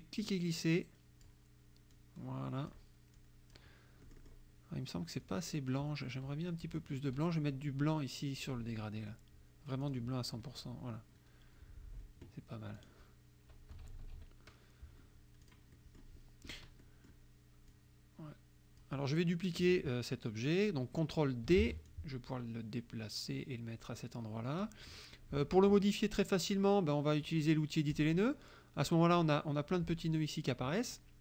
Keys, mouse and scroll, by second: 0.3-1.5 drag, 2.0 click, 3.2 click, 4.1 click, 5.2 click, 8.5 click, 9.9 click, 12.8 click, 13.8 KP_Subtract, 15.5 click, 16.6 click, 17.7-19.0 drag, 21.6 ctrl+d, 21.9-24.8 ctrl+drag, 28.0 click, 29.2 click.